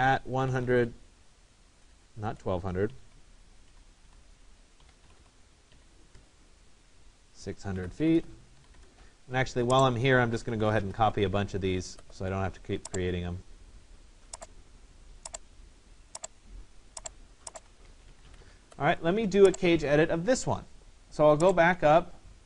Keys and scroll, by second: 6.2 Return, 17.8 Escape.